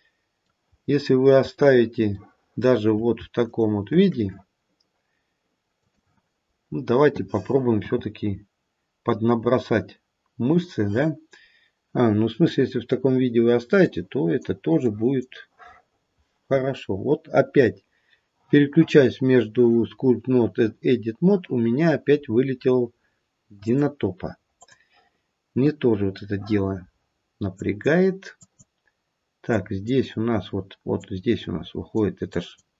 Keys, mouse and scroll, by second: 0.6-1.3 scroll up 3, 2.2 shift+middle click, 3.4 shift+click, 5.9 click, 7.8 f, 13.8 click, 14.8 click, 17.5-20.7 scroll down 4, 21.4-22.2 scroll up 1, 22.2 scroll down 4, 22.5-23.0 scroll down 6, 23.6 click, 27.5 click, 28.4 click, 29.5 click, 31.0 click, 32.3 click.